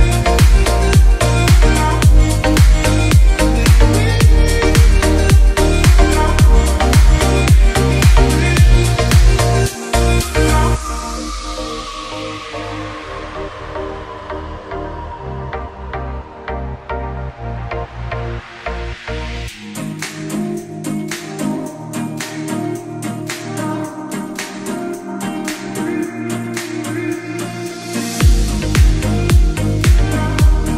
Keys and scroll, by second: 1.2 F10, 9.5 space, 17.6 ctrl+v, 18.7 shift+F2, 21.6 F2, 26.1 shift+Page_Down, 26.8 alt+c, 26.9 alt+w, 27.2 p.